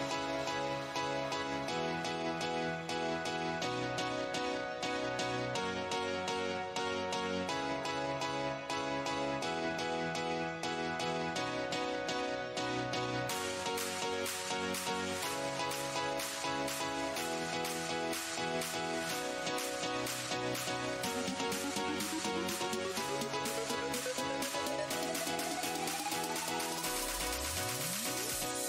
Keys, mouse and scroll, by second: 0.2 shift+Tab, 1.5 shift+Tab, 2.2-2.8 scroll down 1, 3.3 Tab, 3.5 click, 4.7 Tab, 7.1 right click, 7.8 Tab, 8.0 click, 8.9 ctrl+Tab, 9.0 ctrl+click, 9.4 ctrl+Tab, 10.2 click, 12.6 ctrl+click, 13.3 Tab, 13.5 click, 14.0 Delete, 14.5 Tab, 14.5 Delete, 14.7 click, 15.5 w, 16.0 Tab, 16.3 right click, 16.9 alt+Tab, 17.4 Tab, 18.2 Tab, 19.4 Tab, 20.6 right click, 20.6 Tab, 20.8 click, 21.1-22.2 scroll down 3, 23.2-23.7 shift+scroll down 1, 24.0 right click, 24.6 right click, 25.2 shift+Tab, 25.4 w, 25.9 shift+Tab, 27.0 Tab, 27.2 right click, 27.8 click, 28.1 right click, 28.2 Tab.